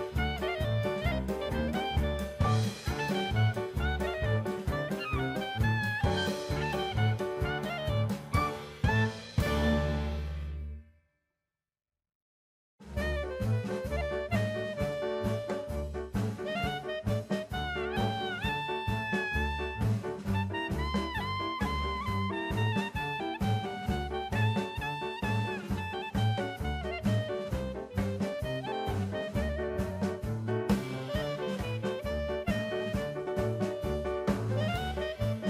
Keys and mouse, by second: 5.3 l, 6.3 shift+d, 7.1 right click, 7.6 r, 7.8 y, 9.2 x, 11.0 right click, 11.8 r, 12.1 x, 12.4 KP_9, 12.5 KP_0, 12.9 KP_Enter, 13.9-15.9 drag, 16.2-19.2 middle drag, 19.8-22.5 drag, 23.5 KP_1, 25.1 middle click, 25.6 middle click, 26.0 click, 26.4 middle click, 27.4 shift+d, 27.9 right click, 29.0 r, 29.7 y, 30.5 KP_9, 30.7 KP_0, 31.0 Return, 32.5 click, 33.4 click, 34.2 middle click, 35.4 ctrl+z.